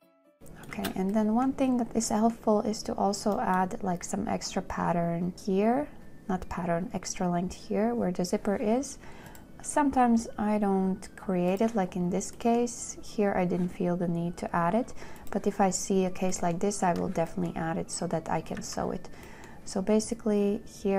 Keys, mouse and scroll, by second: 1.1 space, 18.9 z.